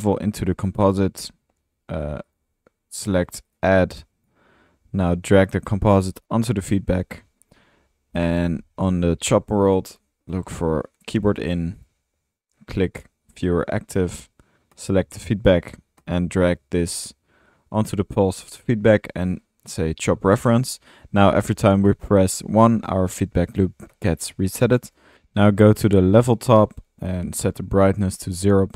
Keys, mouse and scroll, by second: 0.0-0.1 typing, 1.6-2.4 typing, 6.6-7.4 typing, 7.6 Tab, 8.7-9.8 typing, 13.4-14.4 typing, 17.6-18.4 typing, 21.2-25.6 typing, 27.5-28.7 drag.